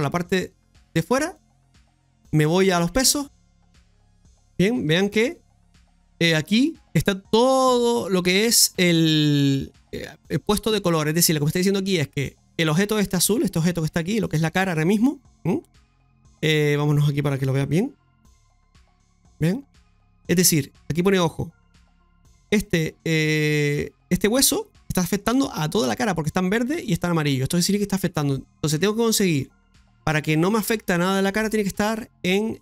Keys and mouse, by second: 1.3-3.2 drag, 3.9 middle click, 4.4 shift+middle click, 5.2 middle click, 9.7 middle click, 18.6 click, 22.1 click, 29.6 middle click.